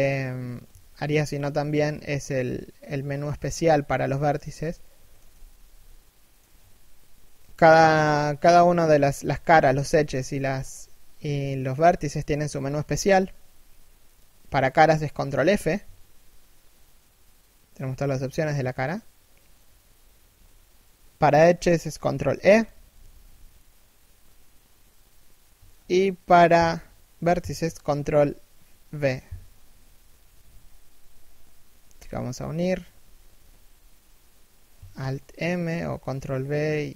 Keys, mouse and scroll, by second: 0.4 ctrl+v, 3.1 shift+middle click, 5.0 z, 5.5 middle click, 15.1 ctrl+f, 21.8 ctrl+e, 33.0 ctrl+f.